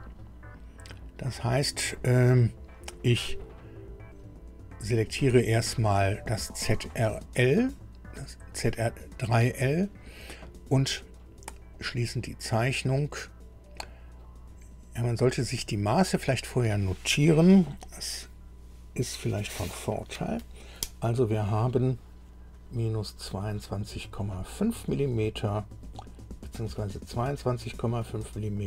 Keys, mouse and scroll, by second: 6.9 scroll up 1, 8.1 click, 11.8 click, 15.3-15.6 scroll down 1, 16.3 click.